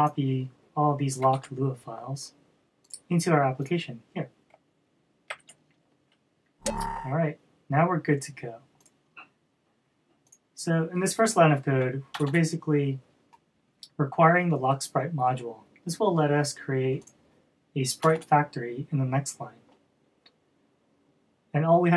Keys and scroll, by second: 1.8 super+c, 5.9 super+v.